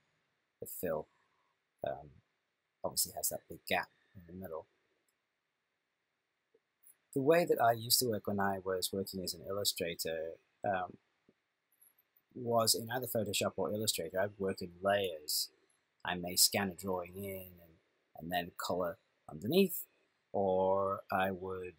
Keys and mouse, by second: 0.7 click, 7.4 click.